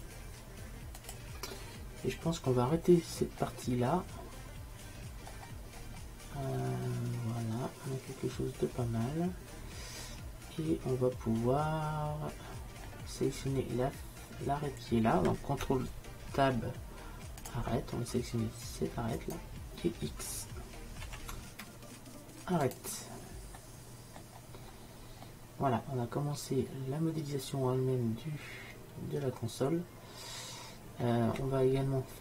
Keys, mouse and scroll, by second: 0.0-1.8 drag, 3.1-5.4 middle drag, 5.8-8.6 middle drag, 16.5 ctrl+t, 19.3-21.1 right drag, 21.1 x, 23.7-27.0 middle drag, 27.4 middle click, 31.5-32.2 middle drag.